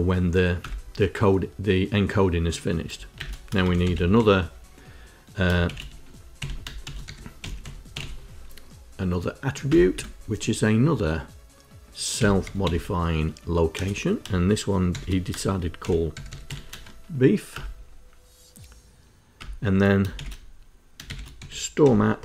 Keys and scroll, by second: 0.4 Return, 2.9-8.2 typing, 9.5 Return, 9.7 Tab, 11.9-13.5 typing, 14.7-16.7 typing, 17.3 Return, 19.9-22.2 typing.